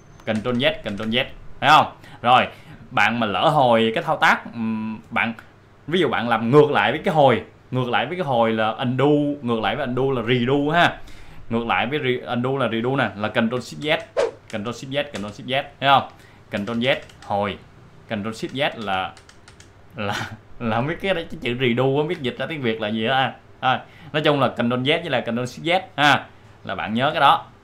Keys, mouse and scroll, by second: 13.8 ctrl+shift+z, 14.5 ctrl+shift+z, 16.3 ctrl+shift+z, 18.1 ctrl+z, 23.5-25.1 drag.